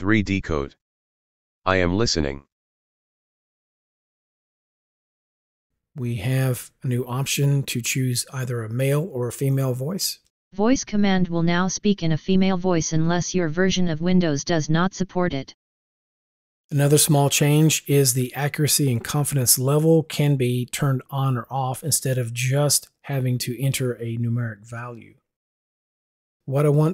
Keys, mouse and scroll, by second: 4.3-5.7 drag, 10.2 click.